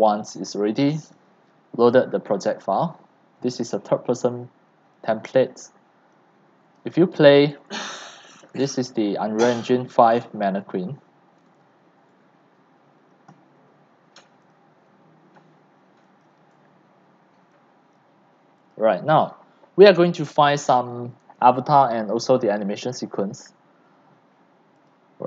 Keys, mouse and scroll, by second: 5.1-7.0 right drag, 7.0-12.1 typing, 12.8 Escape, 14.5-16.0 drag, 16.0-17.6 right drag, 17.6 click, 18.4 right click, 20.7-22.1 typing, 23.0 click, 24.1 click, 24.7 click.